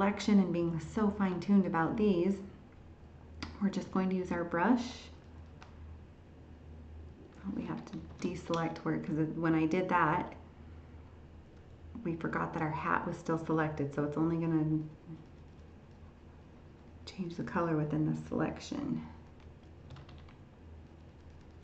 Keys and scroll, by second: 8.1 ctrl+d.